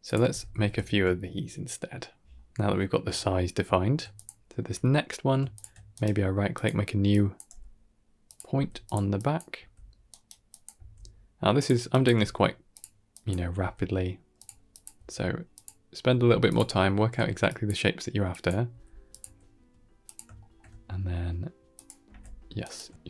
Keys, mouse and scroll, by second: 0.2 shift+r, 0.3 shift+r, 0.4 shift+r, 0.7-1.0 scroll down 2, 1.0 shift+middle click, 3.2 scroll up 2, 3.6 shift+middle click, 4.0 click, 4.3 scroll up 1, 4.5 Tab, 5.4 shift+click, 5.8 right click, 6.9 click, 7.4 g, 8.4 s, 9.0 click, 9.4 s, 10.3 click, 10.6 s, 11.8 click, 12.0 g, 13.0 click, 13.4 s, 14.6 click, 14.8 s, 15.9 r, 17.0 g, 18.2 click, 18.5 r, 19.1 s, 20.2 shift+middle click, 21.6 click, 21.9 e, 22.8 ctrl+z.